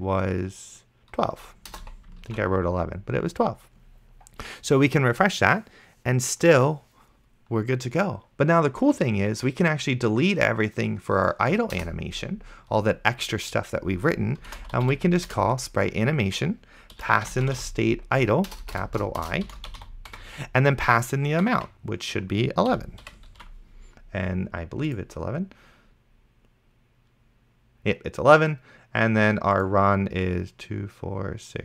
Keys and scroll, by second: 1.9 2, 2.6 ctrl+s, 12.0 BackSpace, 14.4-15.3 typing, 15.3 Return, 16.7-21.4 typing, 22.7 End, 23.1 ;, 23.6 ctrl+s.